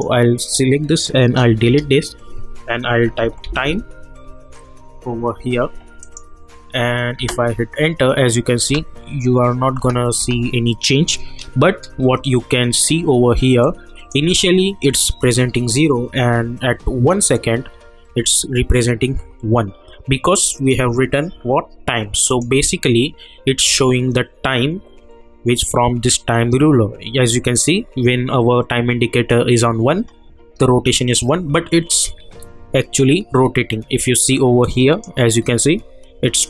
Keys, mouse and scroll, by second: 2.6-4.0 typing, 6.0 click, 7.2 space, 11.9 =, 13.6-16.4 drag, 17.2 click, 20.5 click, 34.6-36.4 drag.